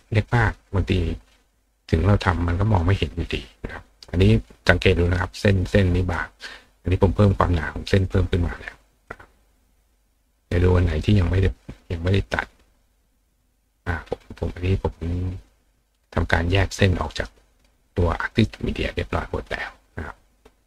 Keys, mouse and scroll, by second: 8.0 click, 8.6 click, 11.0 click, 12.7 click.